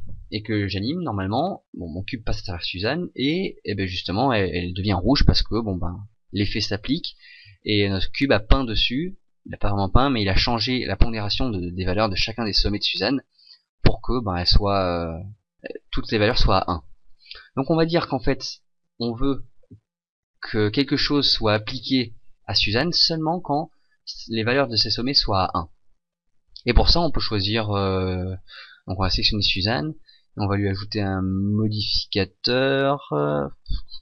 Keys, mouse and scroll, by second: 17.2 right click, 18.3 Escape, 29.0 right click.